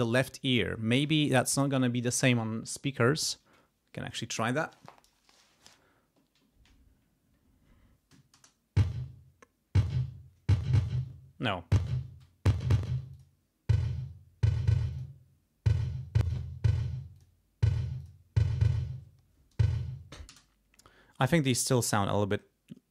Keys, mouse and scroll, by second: 8.3 space, 13.1 click, 14.9 click, 16.2 click, 17.1 click, 17.9 click, 20.2 space.